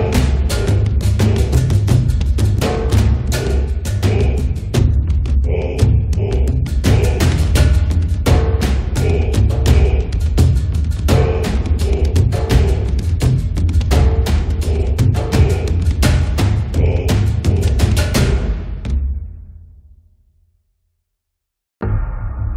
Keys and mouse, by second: 0.7 click, 1.2 middle click, 1.7 click, 1.7 right click, 3.7 middle click, 3.9 click, 3.9 right click, 4.7 middle click, 5.1-6.1 drag, 5.1 right click, 6.1 middle click, 6.3 click, 6.7 middle click, 6.9 click, 8.6 middle click, 8.7-10.2 drag, 9.5 middle click, 9.5 right click, 10.2 middle click, 10.3 click, 10.3 right click, 11.2 middle click, 11.4 click, 11.4 right click, 12.1 middle click, 12.3 click, 12.3 right click, 13.0 middle click, 13.3-14.6 drag, 14.7-16.5 middle drag, 14.8 click, 14.9 right click, 15.5 right click, 15.9 click, 17.0 middle click, 17.3-18.7 drag, 17.3 right click, 19.0 1, 19.1 f, 19.3 middle click, 19.5 click, 20.1-21.8 middle drag, 20.7-21.9 drag, 20.7 right click, 22.1 click.